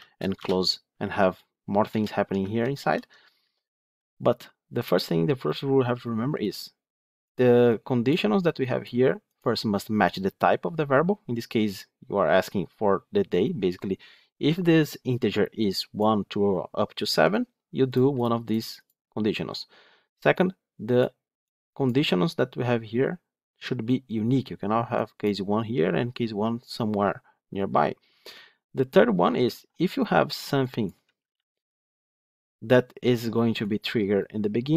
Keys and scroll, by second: 2.4 ctrl+z, 3.2 ctrl+z.